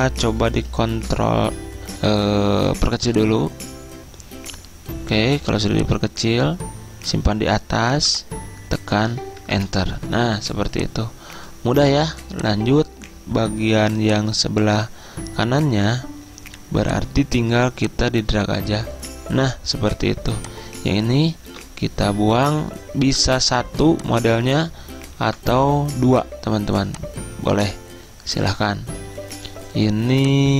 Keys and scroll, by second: 9.6 Return, 21.6 End, 25.3 Delete.